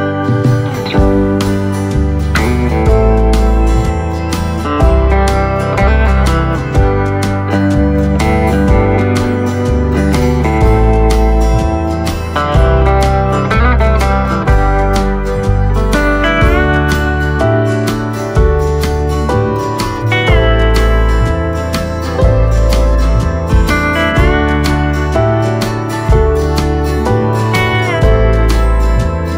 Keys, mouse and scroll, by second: 2.2-4.2 middle drag, 4.2 s, 7.0 middle click, 7.9-8.9 scroll down 1, 8.9 KP_1, 9.4-10.8 middle drag, 10.8 click, 11.6 click, 13.3 click, 14.1-15.7 middle drag, 15.7 click, 17.4-19.2 middle drag, 19.2 s, 22.1 click, 24.5 middle click, 25.4 click, 26.0 middle click, 26.7 click, 27.2 shift+a.